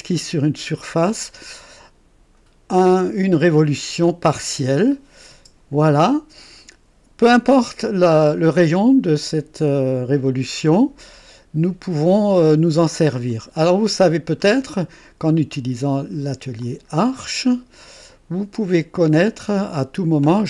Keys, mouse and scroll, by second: 0.1-1.0 drag, 2.7 click, 4.7 click, 5.3 space, 10.9-12.3 drag, 13.2 click, 16.8 click.